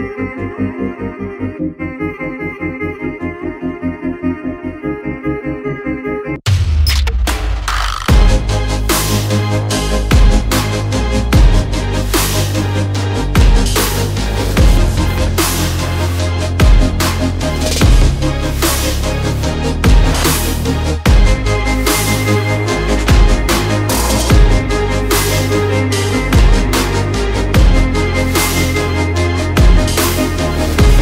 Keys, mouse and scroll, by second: 0.5 shift+Down, 1.2 click, 3.3 click, 7.4 click, 8.2 click, 8.8 shift+click, 15.0 ctrl+z, 15.3 click, 16.8 shift+click, 26.6 click, 28.9 click, 29.6 shift+click, 30.1 shift+click.